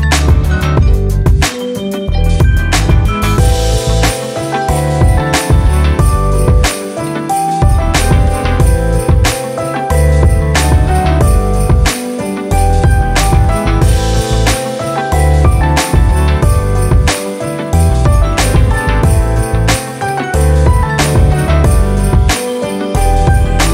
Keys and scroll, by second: 3.4-5.0 typing, 8.3-10.8 typing, 13.3-15.6 typing, 15.8 Return, 19.1 typing, 21.7-23.7 typing.